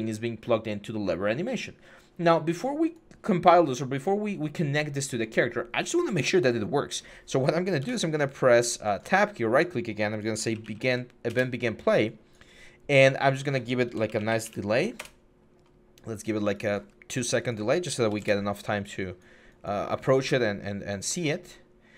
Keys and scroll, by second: 7.6 Tab, 10.2-10.6 typing, 11.1 Return, 13.4-14.2 typing, 14.8 Return, 17.6-18.4 typing.